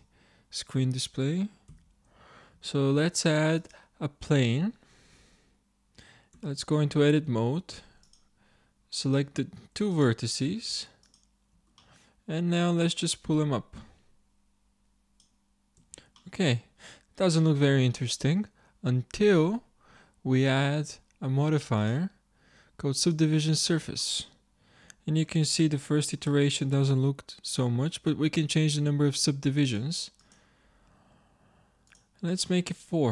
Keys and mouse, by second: 1.7 n, 2.7 shift+a, 6.4 Tab, 7.3 ctrl+Tab, 10.3 click, 11.8-12.9 drag, 13.8-15.0 drag, 15.8 Tab, 21.8-24.0 drag, 24.4-29.7 middle drag, 29.7-32.5 drag, 32.5 middle click.